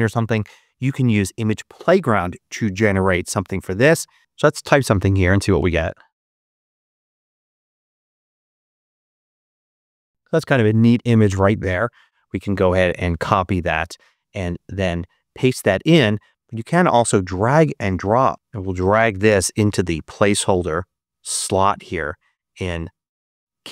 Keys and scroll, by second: 4.2 super+BackSpace, 4.7-7.2 typing, 7.7 Return, 13.5 super+h.